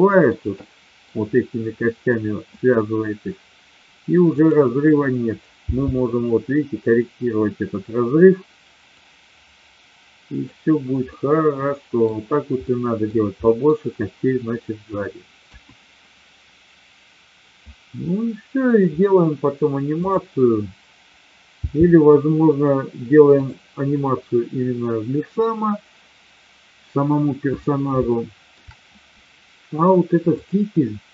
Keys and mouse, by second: 0.6-1.1 middle drag, 4.3-5.3 drag, 5.6 g, 8.9 click, 11.1-11.9 middle drag, 12.6 middle click, 13.5 middle click, 15.3 KP_1, 19.9 click, 21.6 g, 23.3 click, 27.9-28.6 shift+middle drag, 30.2 click.